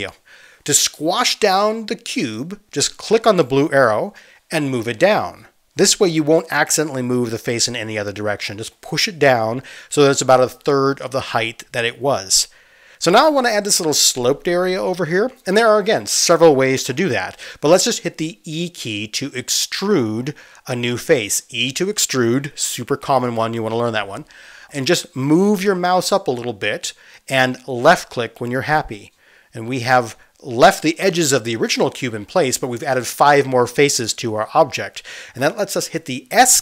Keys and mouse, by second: 3.6-10.7 drag, 10.7-12.1 middle drag, 11.3 click, 12.1-28.9 drag, 19.6 e, 28.9-36.6 middle drag.